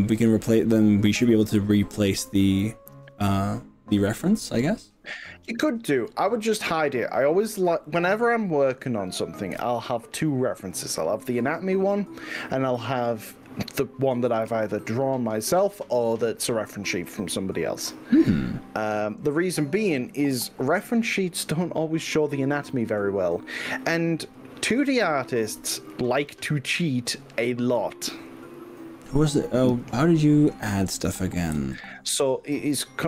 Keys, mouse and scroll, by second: 7.9 click, 9.6 h, 23.9 right click, 24.8 click, 25.5 i.